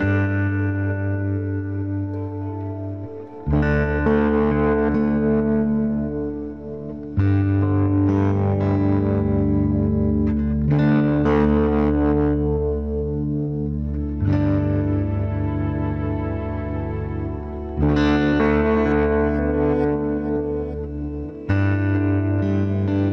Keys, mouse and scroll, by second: 1.3 e, 2.6 z, 3.2-4.8 drag, 4.6 KP_3, 4.9 Tab, 6.0 Tab, 6.6 z, 10.3 ctrl+b, 12.7 ctrl+b, 15.1 click, 15.3 Tab, 15.8 z, 16.0 click, 16.8 Tab, 17.0 z, 17.7 middle click, 21.7 ctrl+r.